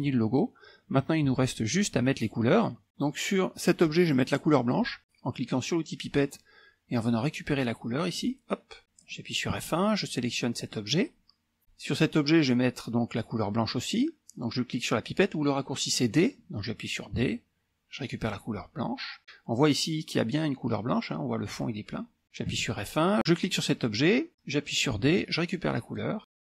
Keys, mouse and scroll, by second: 3.9 click, 6.1 click, 8.1 click, 9.6 F1, 10.6 click, 17.3 d, 18.3 click, 22.6 F1, 23.2 click, 25.0 d, 25.8 click.